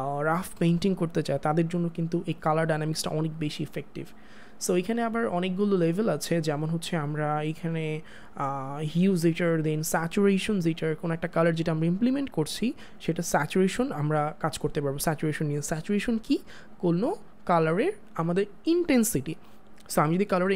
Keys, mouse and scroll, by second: 7.4 click.